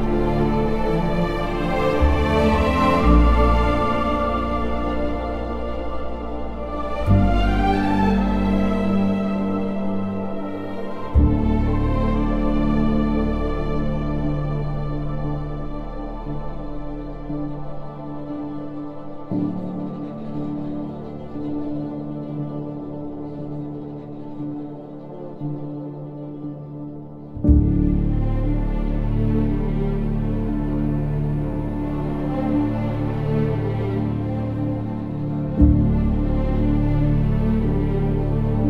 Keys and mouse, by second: 2.1 click, 3.0 click, 4.0 g, 7.7 g, 8.1 click, 8.5 g, 10.0 g, 10.7 click, 11.8 g, 12.4 click, 13.0 click, 13.6 g, 15.2 g, 15.7 click, 20.2 g, 20.9 click, 21.9 g, 22.7 click, 24.5 click, 25.8 g, 27.1 click, 27.9 click, 28.4 g, 29.9 click, 30.3 g, 30.7 click, 31.7 g, 32.1 click, 32.5 click, 33.0 g, 33.5 click, 34.2 click, 34.7 g, 35.2 click, 35.9 g, 36.5 click, 38.3 g.